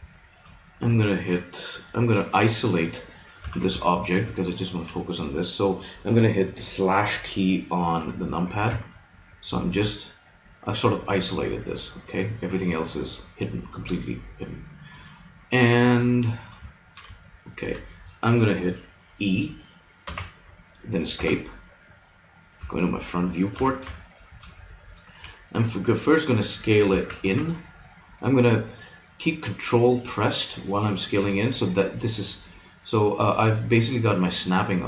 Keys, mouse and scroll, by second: 0.0 middle click, 3.4 z, 4.0 middle click, 8.6 KP_Divide, 10.0-11.7 middle drag, 14.4-17.2 middle drag, 20.0 e, 22.6 KP_1, 23.6 z, 26.8 s.